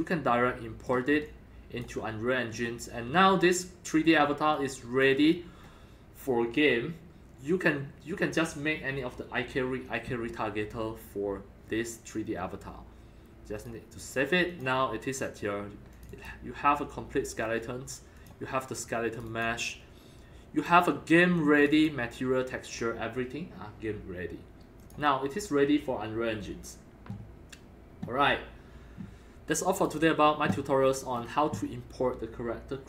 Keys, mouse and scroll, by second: 1.2 alt+click, 2.5 scroll down 3, 3.2 alt+middle click, 4.5 alt+click, 5.3-5.6 scroll up 5, 5.8-6.4 scroll down 4, 6.3-8.3 middle drag, 13.6-14.6 drag, 15.9 click, 16.1 click, 19.1 click, 19.2 click, 20.5 click, 21.6 click, 21.7 click, 24.8-28.3 drag, 29.7 click, 30.8 scroll up 2, 31.0-31.3 scroll down 4, 32.6-32.8 middle drag.